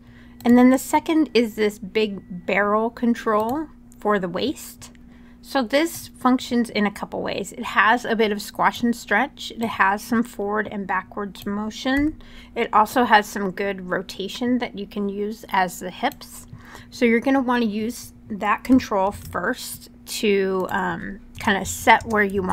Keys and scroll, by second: 11.7 e, 18.8 super+z, 21.1 0, 21.4 Tab, 21.7 0, 22.1 Tab, 22.3 0.